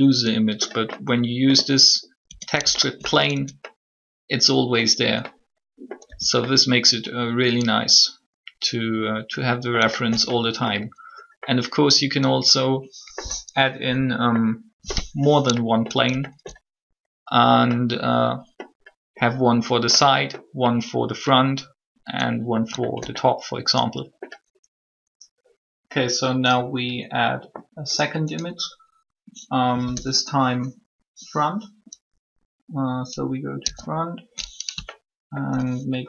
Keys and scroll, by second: 2.2 Tab, 3.3 alt+Tab, 6.0 a, 33.6 1.